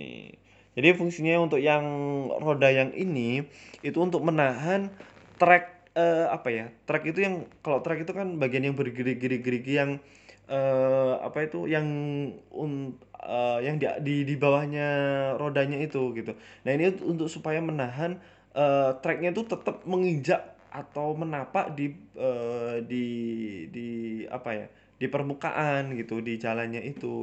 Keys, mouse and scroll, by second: 0.1 middle click, 0.6 z, 6.2 middle click, 7.4 KP_3, 8.5 middle click, 9.0-9.7 scroll down 3, 9.2 middle click, 10.0 KP_1, 10.4 scroll up 3, 10.7 shift+middle click, 11.2-11.8 scroll down 4, 11.8-12.3 scroll up 2, 13.7 click, 18.3 click, 18.4 click, 21.1 middle click, 22.0 middle click, 22.7 KP_3, 23.1-23.6 scroll up 2, 23.6 g.